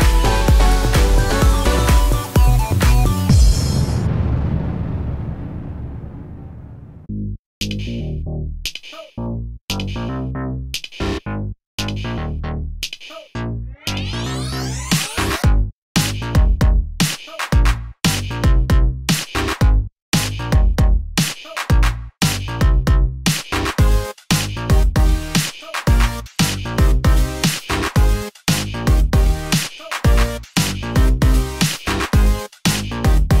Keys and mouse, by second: 3.9 2, 6.5 click, 7.5 click, 9.1 ctrl+click, 9.5 KP_Decimal, 11.2 click, 11.2 middle click, 17.5 click, 17.5 middle click, 17.7 ctrl+click, 17.7 ctrl+middle click, 18.9 ctrl+click, 18.9 ctrl+middle click, 19.1 shift+middle click, 19.5 ctrl+click, 20.3-21.3 ctrl+drag, 21.8 ctrl+click, 22.1 ctrl+middle click, 25.4-26.4 alt+shift+middle drag, 26.4-31.8 ctrl+right drag, 30.0 ctrl+click, 30.0 ctrl+middle click, 30.5 ctrl+click, 30.5 ctrl+middle click, 30.8 ctrl+click, 30.8 ctrl+middle click, 31.5 ctrl+click, 31.8-33.4 shift+middle drag, 32.2 ctrl+click, 32.2 ctrl+right click, 33.1 ctrl+right click.